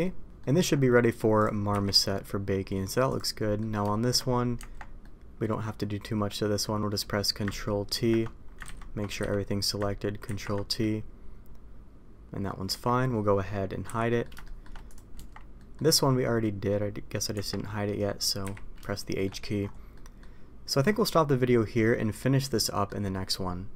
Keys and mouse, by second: 0.2 Tab, 0.3 middle click, 1.6 h, 1.9 middle click, 3.0 click, 3.3 middle drag, 3.8 shift+middle drag, 4.5 Tab, 4.9-6.5 middle drag, 7.8 ctrl+t, 8.6 ctrl+z, 9.1 a, 10.2 ctrl+t, 10.7-12.4 middle drag, 12.6 Tab, 13.8 h, 14.0 middle click, 14.4 shift+middle click, 14.8 click, 15.1 Tab, 15.5 middle click, 17.3 Tab, 18.4 h, 18.8-19.2 shift+middle drag, 19.9 middle drag, 22.5-22.8 middle drag.